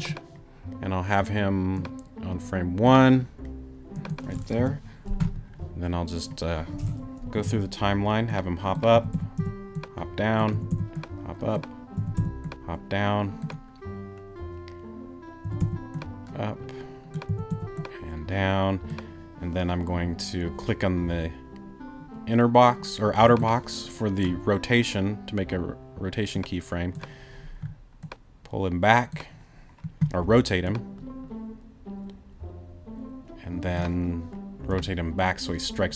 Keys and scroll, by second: 4.6 BackSpace, 7.2 Right, 8.9 Right, 10.5 Right, 12.0 Right, 15.4 Right, 17.3 Right.